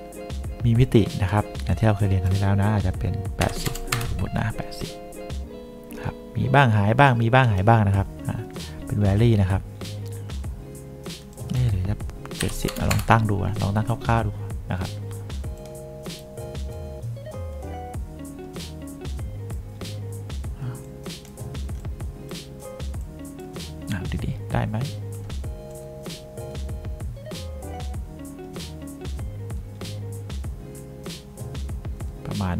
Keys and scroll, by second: 3.6 8, 4.0 Return, 12.5 7, 12.8 0, 13.0 Return.